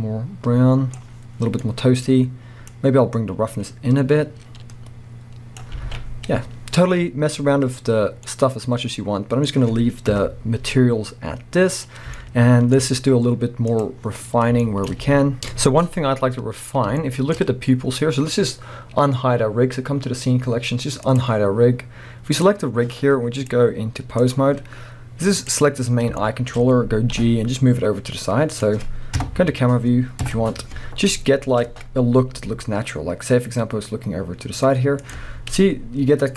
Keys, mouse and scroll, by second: 2.8-8.3 drag, 5.9 alt+a, 6.1-6.8 scroll down 2, 6.8 scroll up 1, 7.8 scroll down 1, 8.3-13.8 middle drag, 10.1 KP_0, 10.9-12.1 scroll up 1, 13.8 click, 14.3-14.7 scroll down 1, 14.7 shift+middle click, 15.1 z, 15.4 n, 16.1-16.5 scroll up 1, 17.0-20.4 shift+middle drag, 17.3-18.1 scroll up 1, 21.1 click, 21.4-21.7 scroll down 1, 21.7-22.3 scroll up 1, 22.3 click, 23.4-25.5 drag, 24.5-25.3 scroll up 2, 25.6-26.2 scroll up 1, 26.2-29.2 shift+middle drag, 27.2 g, 29.2 KP_0, 30.8 scroll down 1, 31.3-32.3 scroll up 1, 32.3 g, 35.1 click, 35.3-35.6 scroll up 1.